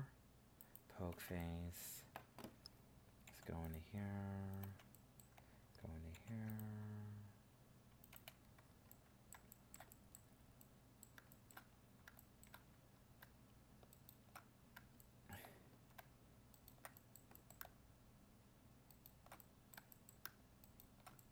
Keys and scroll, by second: 3.2 ctrl+r.